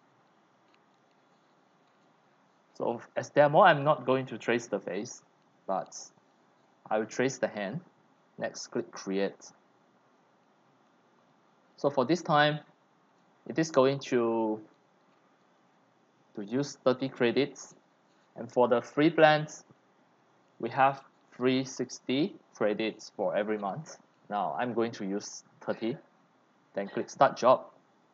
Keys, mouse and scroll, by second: 7.6 scroll down 2, 9.3 click, 14.3 click, 27.1-28.1 drag.